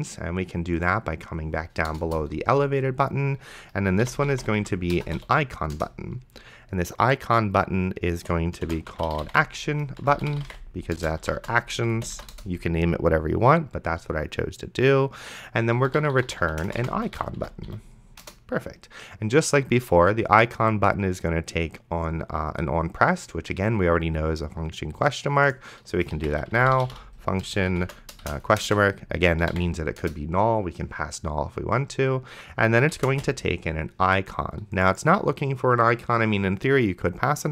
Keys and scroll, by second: 2.2 Return, 4.2 c, 4.9 shift+g, 5.0 BackSpace, 5.2 u, 5.8 Return, 8.2-12.2 typing, 12.4 Return, 15.5-18.2 typing, 18.2 Return, 26.1-29.8 typing, 30.0 Return, 32.9 ,, 33.1 space.